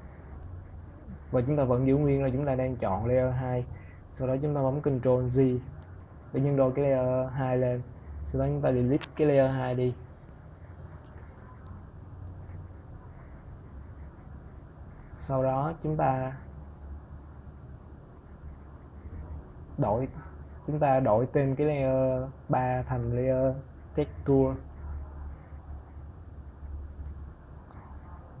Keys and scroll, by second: 4.4 ctrl+j, 8.3 Delete, 23.2 shift+t, 23.6 e, 25.2 Return.